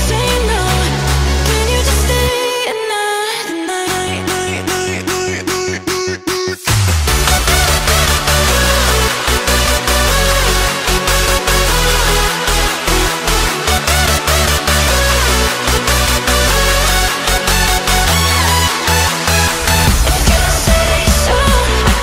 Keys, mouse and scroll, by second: 0.8-1.1 scroll up 2, 1.1 r, 3.8-5.0 middle drag, 5.0 KP_7, 5.5-6.0 shift+middle drag, 6.0 scroll up 2, 6.3-7.5 middle drag, 7.5 g, 8.1-8.8 middle drag, 8.8-9.5 scroll up 2, 9.5 s, 10.2-10.7 scroll down 2, 10.7 r, 11.6-13.9 middle drag, 13.9 r, 15.3 middle click, 15.8 KP_1, 16.0 click, 16.8-17.1 scroll down 2, 17.1 shift+middle click, 17.6 click, 17.9-19.7 middle drag, 19.7 click, 20.0 shift+click, 21.0 shift+click, 21.9 g.